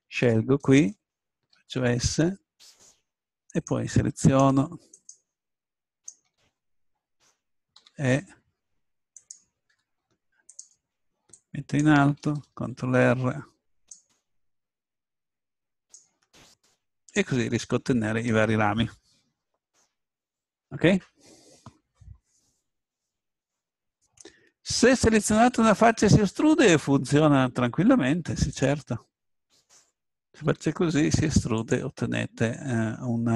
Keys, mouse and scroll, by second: 1.5 s, 2.7 click, 4.7-8.0 drag, 7.9 e, 10.0 s, 12.7 ctrl+r, 16.4-19.3 drag, 25.6-27.5 drag, 28.8-31.4 drag, 30.4 e, 31.7-33.3 drag.